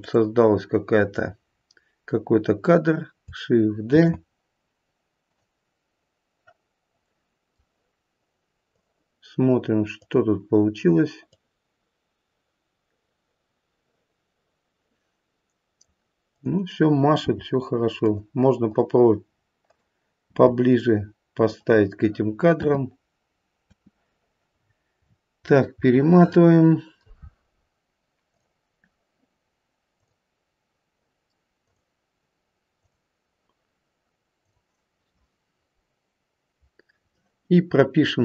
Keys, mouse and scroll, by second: 0.0 click, 3.9 shift+d, 7.0 middle click, 7.2 middle click, 8.6 click, 9.9 click, 11.3 click, 16.2 click, 17.2 g, 18.6 click, 19.6 click, 20.2 g, 22.5 space, 23.6 space, 24.5-26.0 scroll up 17, 25.9 middle click, 28.2 click, 29.9 click, 31.6 click, 32.8 click, 34.3 click.